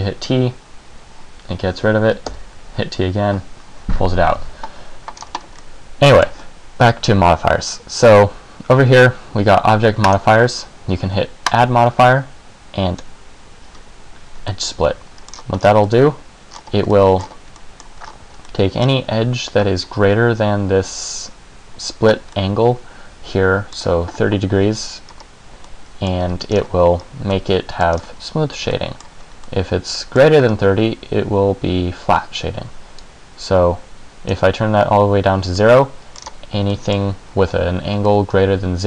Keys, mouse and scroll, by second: 2.4 t, 5.3-5.7 scroll down 1, 5.7 middle click, 10.2 click, 11.6 click, 14.7 middle click, 15.5-16.3 scroll down 6, 16.0 middle click, 16.8 scroll up 1, 17.1 middle click, 17.4 scroll up 2, 17.8 middle click, 18.2 scroll up 2, 18.6 middle click, 22.5 middle click, 25.2 scroll up 2, 25.8 middle click, 26.6 scroll down 2, 27.2 scroll up 1, 27.5 middle click, 28.1-28.5 scroll down 2, 28.9 middle click, 29.7 middle click, 30.6-31.0 scroll up 1, 33.2 click, 35.7 middle click, 36.4-36.9 scroll down 3, 36.9 middle click, 38.2 middle click.